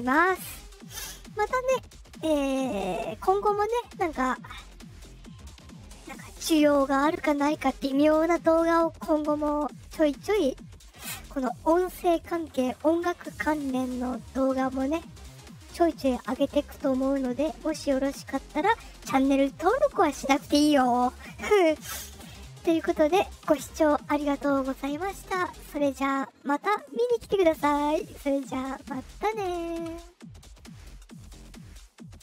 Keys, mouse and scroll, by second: 23.6 click, 32.1 click.